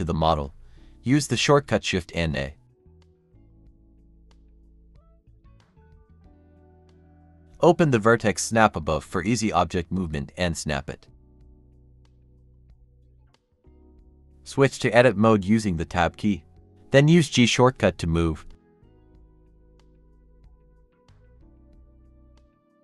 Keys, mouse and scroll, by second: 0.2 middle click, 1.4-1.7 scroll up 1, 2.4 typing, 6.2 typing, 6.6 Return, 10.1 typing, 12.4-14.1 typing, 14.8 Tab, 15.3-16.3 typing, 19.1 typing, 19.5-20.1 scroll down 1, 20.1-20.4 scroll up 1, 20.3-21.1 typing, 21.7 scroll up 1, 22.3 typing, 22.7 ctrl+r.